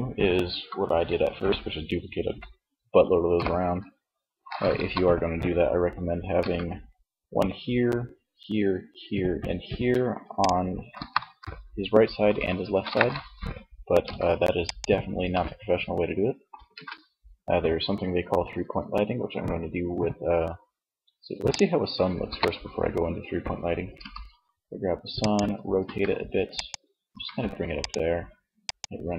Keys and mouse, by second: 3.8 KP_3, 5.3 g, 9.6-11.1 drag, 9.9 KP_1, 13.0 x, 15.7 shift+a, 21.4 KP_3, 23.1 r, 24.5-29.1 drag, 24.9 g, 26.2 g.